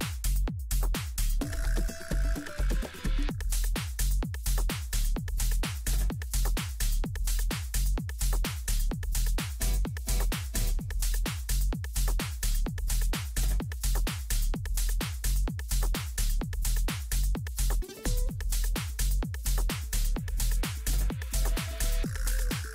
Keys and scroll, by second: 1.8 ctrl+u.